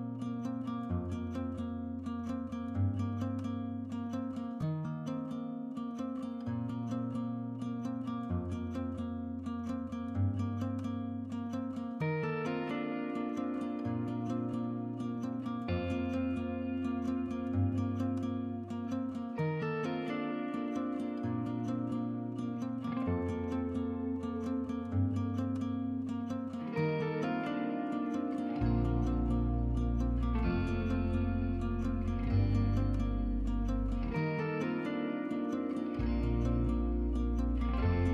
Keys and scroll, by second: 3.1-3.8 typing, 16.6 2, 24.6-25.4 typing, 35.2-37.9 Escape.